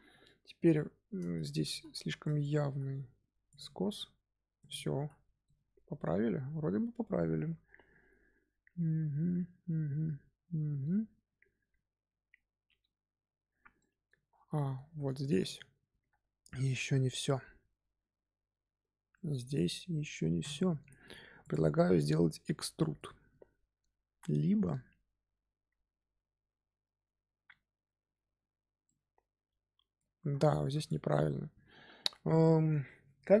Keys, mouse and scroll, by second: 1.1-1.4 scroll up 1, 1.4 Tab, 1.6 z, 2.1 click, 2.6 g, 3.7 Tab, 4.1-4.5 scroll down 1, 4.5 click, 4.7 scroll down 1, 5.4-8.4 middle drag, 13.7-14.2 middle drag, 14.2 scroll up 1, 14.5 shift+middle drag, 14.8 scroll up 2, 15.1 click, 18.6 Tab, 19.1-19.6 middle drag, 19.6 3, 21.3 click, 21.5-24.7 middle drag, 28.8-30.5 middle drag, 30.5 3, 30.7 click, 31.1-33.4 middle drag.